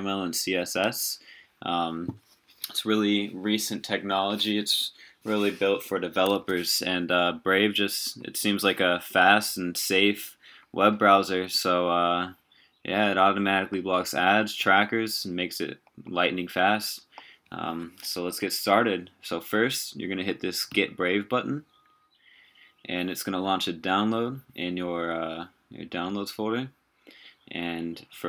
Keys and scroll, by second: 6.4 super+w.